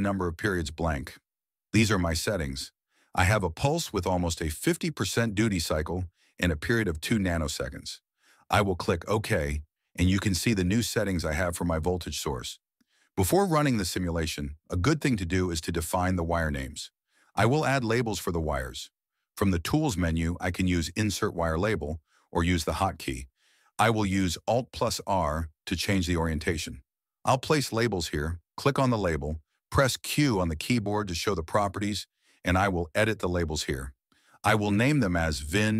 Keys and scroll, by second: 17.4 alt+i, 21.0 Escape, 25.4 alt+r, 27.9 c, 29.1 q, 30.2 Caps_Lock, 30.3-31.3 typing, 33.0 q.